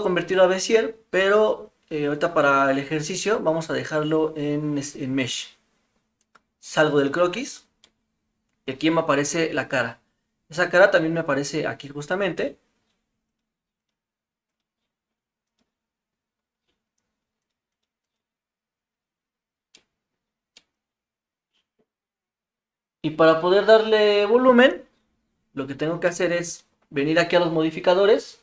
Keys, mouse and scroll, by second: 3.2-4.0 middle drag, 7.8-9.3 middle drag, 9.6 click, 10.8 click, 13.3 click, 14.6-16.2 drag, 17.8 click, 19.7 middle click, 20.5-21.8 middle drag, 26.6 click.